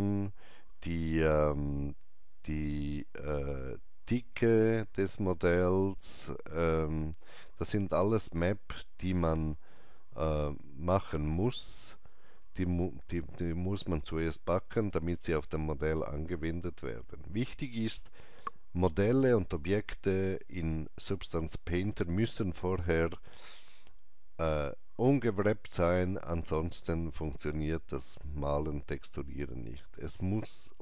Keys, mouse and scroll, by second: 7.2 alt+right click, 7.2 click, 12.1 alt+right click, 12.1 click, 12.4 alt+middle click.